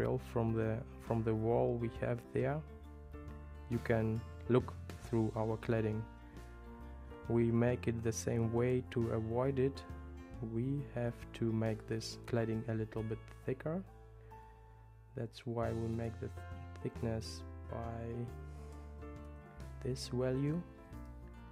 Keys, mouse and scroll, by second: 3.8 super+middle click, 8.9 shift+middle click, 16.0-21.5 drag.